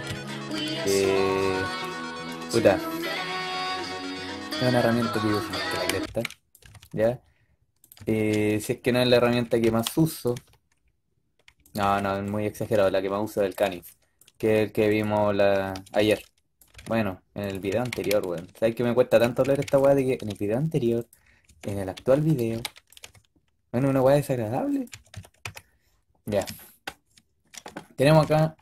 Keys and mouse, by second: 0.9 a, 1.1 a, 1.3 a, 1.4 b, 2.4 g, 5.4-6.5 typing, 9.0-10.2 typing, 10.0-11.3 drag, 11.7 b, 12.3-13.0 drag, 12.6 g, 13.6 b, 14.3 g, 15.4-20.0 typing, 17.5-19.1 drag, 21.3-22.9 typing, 22.2-24.6 drag, 24.8 a, 25.0 a, 25.3 a.